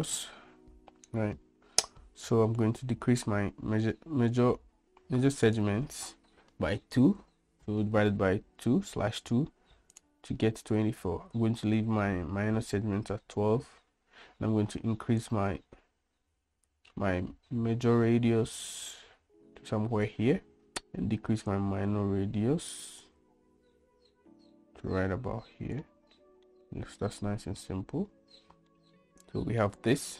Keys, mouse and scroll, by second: 5.6-10.3 drag, 15.4-20.6 drag, 21.9-26.2 drag, 26.9-27.8 middle drag, 29.0-29.8 middle drag.